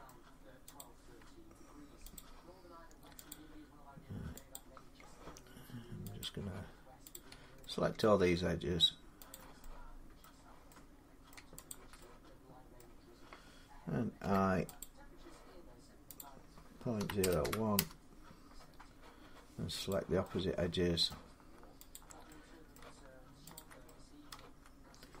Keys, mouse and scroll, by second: 0.6 click, 1.9 click, 3.1 click, 4.3 click, 6.1 click, 6.9 click, 7.8 middle click, 9.1 shift+click, 9.3 shift+click, 10.0 middle click, 11.1 middle click, 11.5 shift+click, 12.6 middle click, 14.0 i, 14.6 click, 16.0 click, 16.8-17.2 typing, 17.5 Return, 18.4 typing, 19.7 click, 20.9 middle click, 20.9 Return, 21.7 shift+click, 22.5 middle click, 23.3 shift+click, 24.1 middle click.